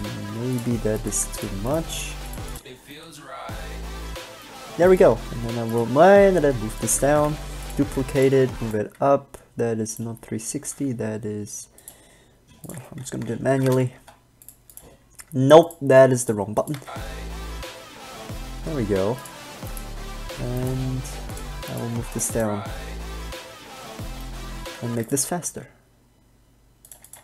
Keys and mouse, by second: 0.3 g, 1.4 g, 2.0 g, 3.2 middle click, 3.8 click, 5.4 shift+d, 6.6 g, 7.4 shift+d, 8.2 g, 8.8 alt+a, 10.8 g, 16.9 alt+a, 19.1 g, 19.9 click, 20.9 g, 22.1 g, 25.1 alt+a, 25.6 g.